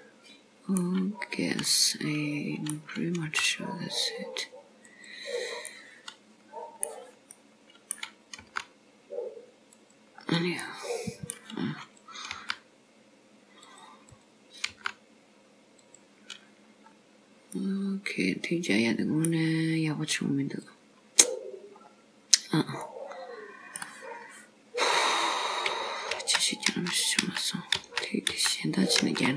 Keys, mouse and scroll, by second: 1.7 middle click, 3.3 g, 5.8 middle click, 7.4 middle click, 8.5 g, 10.2-10.5 scroll down 3, 10.7 middle click, 12.1 click, 12.4 g, 14.1 click, 14.8 g, 16.6 scroll up 1, 17.0-17.5 scroll down 2, 17.6 middle click, 19.8-20.4 scroll up 2, 20.7 click, 22.9 middle click, 26.2 ctrl+z, 26.8 ctrl+z, 27.3 ctrl+z, 27.8 ctrl+z, 28.4 ctrl+z, 29.1 ctrl+z.